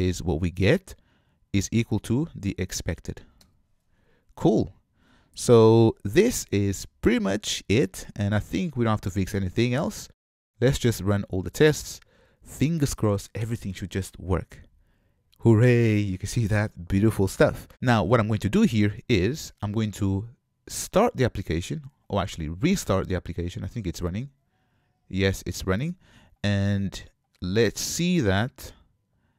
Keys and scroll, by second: 3.5 Return, 17.7 shift+F10, 27.4 shift+F10.